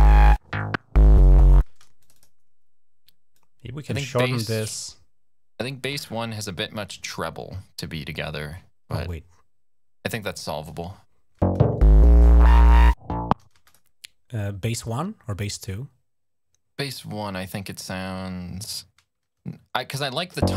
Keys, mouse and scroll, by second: 1.4 space, 1.8 click, 3.1-4.3 drag, 8.8-10.4 drag, 11.2 space, 13.4 space, 13.5 click, 20.2 space.